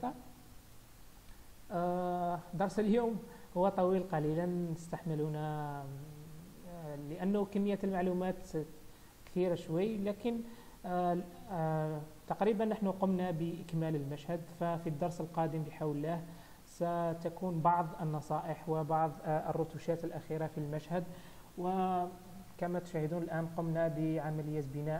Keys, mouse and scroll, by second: 1.5 scroll down 1, 2.4 shift+middle click, 3.0 scroll up 1, 12.6 click, 13.6-14.0 scroll up 2, 14.3 scroll down 1, 14.8 shift+middle click.